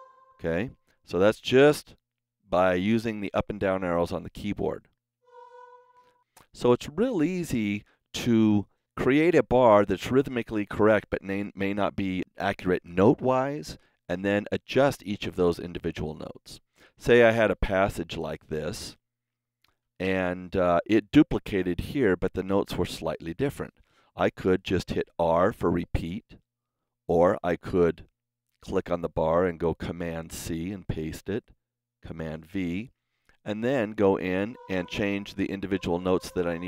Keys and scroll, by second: 5.1 Down, 25.1 r, 26.7 super+z, 30.0 super+c, 32.3 super+v, 35.5 Left.